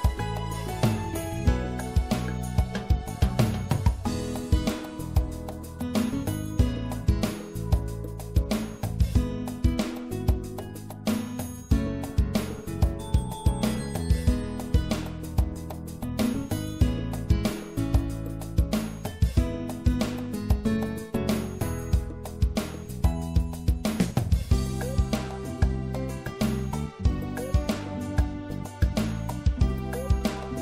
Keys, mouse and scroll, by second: 2.1 ctrl+r, 5.8-9.0 right drag, 6.8-7.8 drag, 9.0-14.0 middle drag, 14.0 ctrl+r, 19.2 click, 19.4 middle click, 27.2-29.2 right drag, 29.4 middle click.